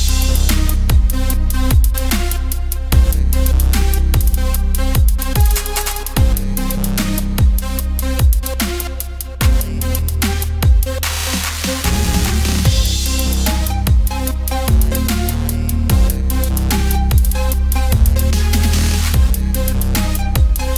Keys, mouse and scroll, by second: 0.0-1.3 drag, 1.7 o, 2.3 s, 8.6 click, 9.0 s, 10.1 KP_1, 11.4 middle click, 11.9 Tab, 12.7 middle click, 13.2-13.7 scroll up 1, 13.7 middle click, 14.5-14.9 scroll up 1, 14.9 middle click, 15.8 click, 16.3-16.7 scroll up 1, 16.7 middle click, 17.5 KP_1, 19.0 shift+a, 20.5 click.